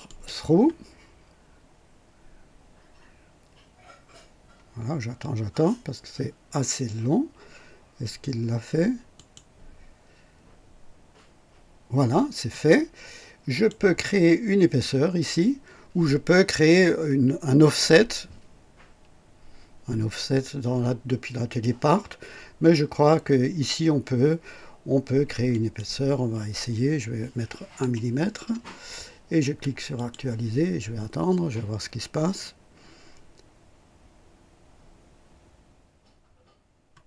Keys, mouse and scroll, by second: 0.0 click, 9.1 click, 13.5 click, 25.4 click, 27.7 KP_1, 29.9 click.